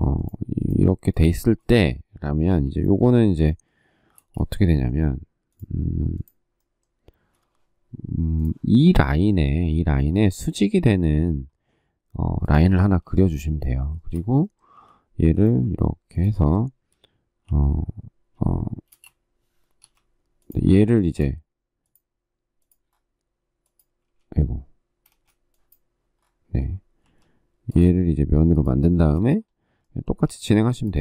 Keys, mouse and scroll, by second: 1.1 space, 2.4 m, 4.0 space, 12.6 space, 13.7 shift+middle click, 14.5 m, 15.2 ctrl+click, 17.2 r, 18.6 space, 19.6 l, 24.8 space, 28.7 space, 30.0 p.